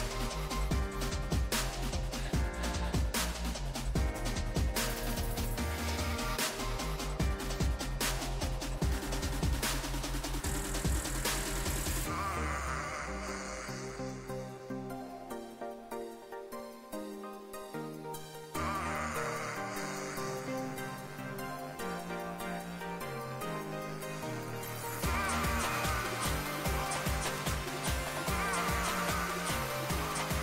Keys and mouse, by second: 0.0-1.1 drag, 2.8 s, 5.0 s, 8.3-10.6 drag, 10.6-12.3 middle drag, 12.4 Tab, 12.7 a, 12.9 a, 13.7 alt+s, 19.9 click, 21.6-24.6 drag, 22.5-24.6 right drag, 24.6 ctrl+z, 25.8 z, 26.6 w, 29.9 z.